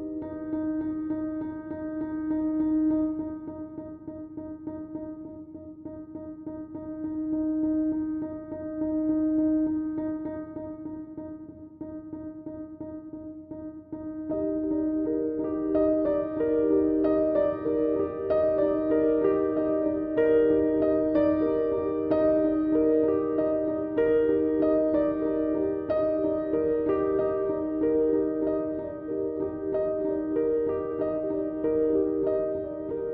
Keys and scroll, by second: 6.4 Delete, 27.7 s.